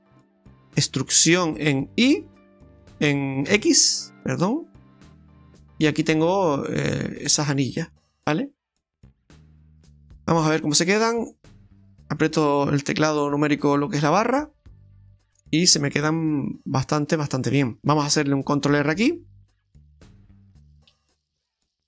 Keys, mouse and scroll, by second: 0.2 middle click, 1.3 e, 6.2-6.7 scroll down 4, 6.7 middle click, 9.3 scroll up 2, 10.6 click, 14.6-14.9 scroll up 2, 14.9 middle click, 17.6 scroll up 1, 19.5 ctrl+r.